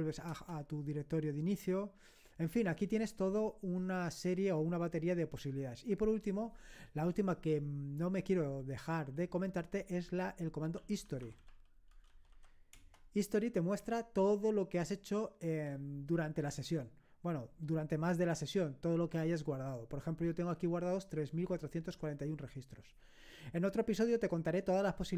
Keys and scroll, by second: 0.3 Return, 10.6-12.8 typing.